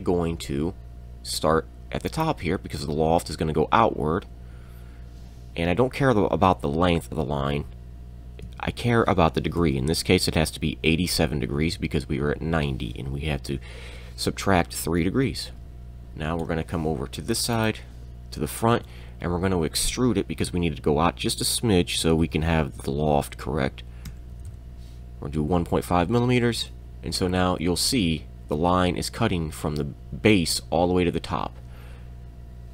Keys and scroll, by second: 8.4 Tab, 9.6 3, 10.3 BackSpace, 11.3 8, 11.5 7, 15.6 Return, 18.8 e, 22.0 1, 24.1 5, 24.3 m, 26.4 Return.